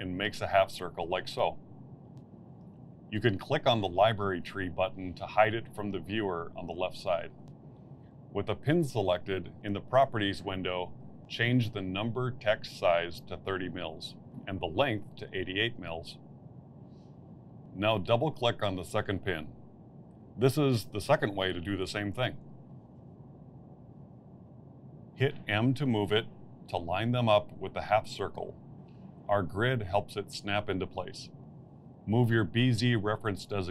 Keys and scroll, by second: 16.9 8, 17.2 Return, 23.1 8, 26.3 m, 33.1 m.